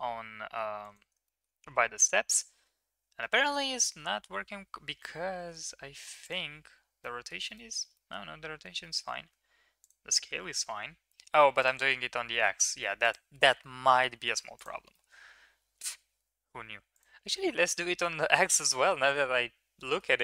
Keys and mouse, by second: 1.2 shift+middle drag, 5.3 ctrl+a, 7.0-7.3 middle drag, 7.5 middle drag, 7.9 middle click, 8.8 middle click, 9.2 ctrl+a, 11.6 click, 13.0 click, 14.5 click, 14.9-15.8 middle drag, 16.9 click, 18.0-20.0 middle drag.